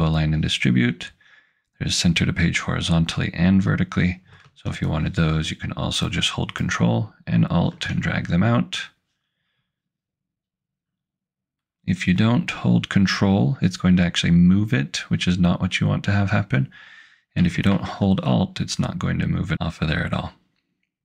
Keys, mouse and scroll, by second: 4.9 ctrl+alt+click, 17.7 ctrl+alt+click.